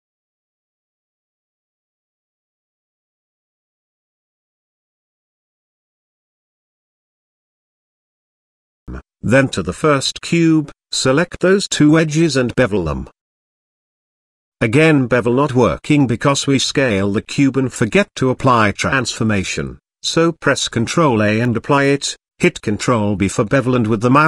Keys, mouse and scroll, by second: 0.7 g, 3.3 g, 5.2 middle click, 5.8 z, 6.6 shift+middle click, 7.4 middle drag, 7.8 shift+middle drag, 8.4 shift+middle click, 8.9 Tab, 9.6 Tab, 10.9 click, 11.6 click, 12.3 click, 14.2 middle click, 15.2 shift+middle click, 16.5 ctrl+b, 18.9 Tab, 19.4 ctrl+a, 20.0 Tab, 20.6 ctrl+b.